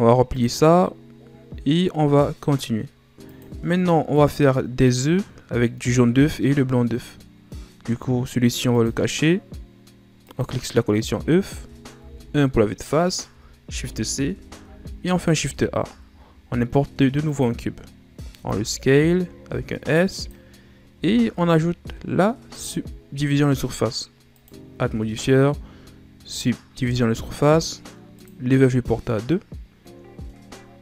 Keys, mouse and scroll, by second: 0.2-3.4 drag, 4.1 click, 8.7 click, 10.2 click, 12.0 KP_1, 13.6 shift+c, 14.3-15.4 shift+scroll down 4, 15.4 shift+a, 18.3 s, 20.5-20.9 scroll up 4, 20.9 Tab, 22.5-25.2 drag, 25.2-25.8 shift+scroll down 3, 25.8-28.1 scroll up 3, 28.1-30.8 drag.